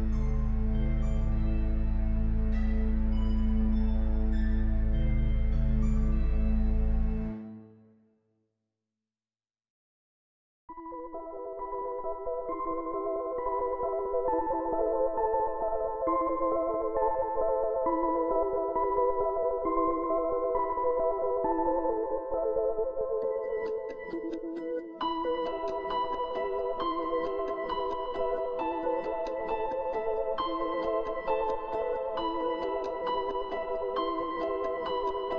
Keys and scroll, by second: 4.3 typing.